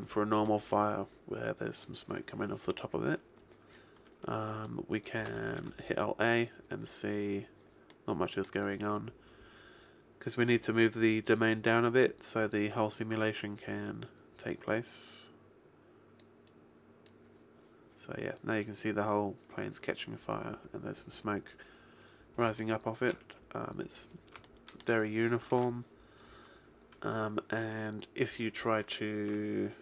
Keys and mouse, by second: 4.8 click, 5.6 alt+a, 16.6 click, 25.6 alt+a.